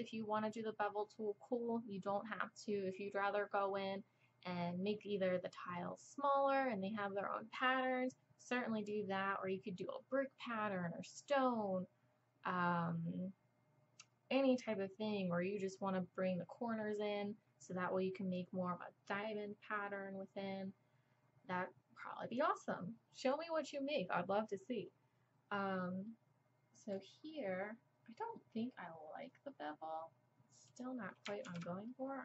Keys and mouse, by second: 26.1-28.0 drag, 28.0 middle click, 28.5 middle click, 31.5 ctrl+z, 32.0 drag.